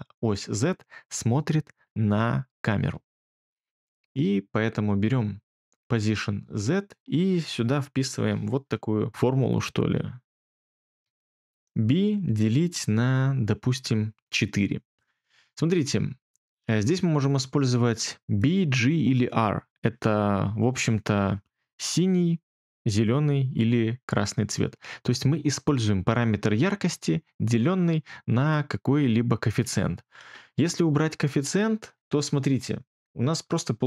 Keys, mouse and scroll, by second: 10.7-11.7 typing, 13.8 4, 31.3 BackSpace, 31.5 BackSpace.